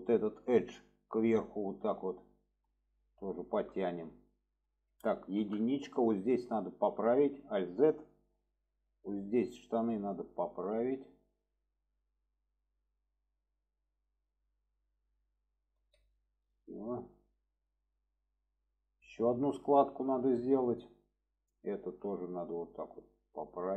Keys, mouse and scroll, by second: 0.1 click, 0.8-2.6 drag, 3.3 shift+middle drag, 4.3 shift+middle click, 6.6 click, 7.4 alt+z, 7.8 click, 8.6-9.8 drag, 10.3 click, 11.0-12.0 drag, 12.4 click, 13.4 click, 14.8 shift+middle drag, 15.7 alt+z, 16.2-17.8 middle drag, 18.6-19.2 alt+middle drag, 19.9 shift+middle click, 21.5 click, 22.2-23.7 drag.